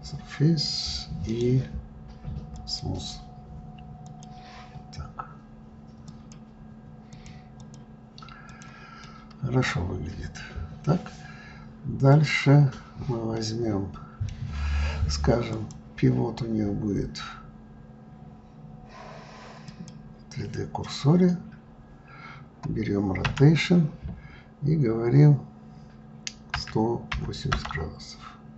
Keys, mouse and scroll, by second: 1.0-3.8 right drag, 3.8 click, 5.8-7.8 drag, 8.2 click, 8.8-9.4 middle drag, 9.4-10.6 scroll down 7, 11.8 click, 13.1-15.2 middle drag, 15.2-18.3 drag, 20.5-22.7 scroll down 5, 22.7 scroll down 1, 23.0 r.